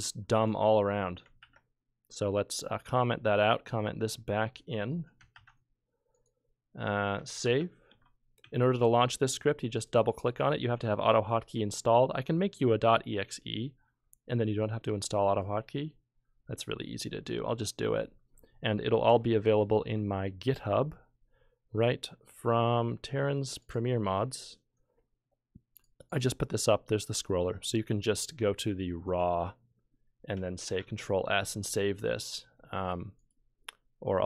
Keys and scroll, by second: 1.4 ctrl+k, 5.3 ctrl+q, 7.4 s, 7.9 ctrl+F3, 8.5 ctrl+F2, 30.7 ctrl+s.